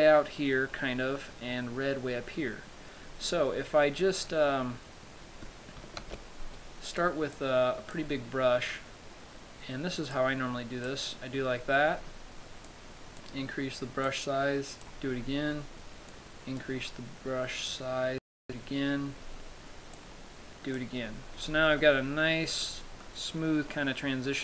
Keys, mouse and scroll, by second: 6.3 ctrl+z, 7.6 click, 10.4 click, 13.0 click, 14.3 click, 16.4 click, 18.0 click, 19.1-20.0 scroll down 3, 20.2 click, 21.7-22.1 scroll up 4, 22.1 middle click, 22.9-23.7 scroll up 2, 23.3 middle click, 24.1 middle click.